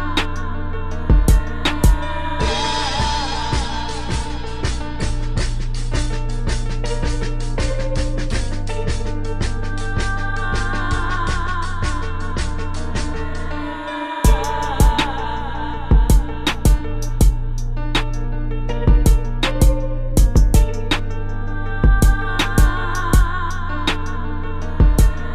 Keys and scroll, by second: 0.5 space, 1.9 space, 2.4 space, 4.0 space, 4.6 space, 4.8 space, 12.2 space, 12.6 space, 13.0 space, 13.7 space, 14.9 space, 15.1 space, 18.0-20.3 typing, 22.2 space.